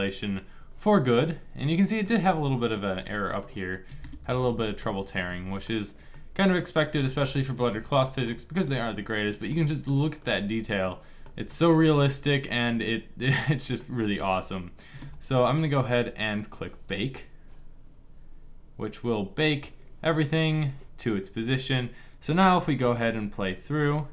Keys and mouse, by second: 16.5-19.8 drag, 23.5 middle click.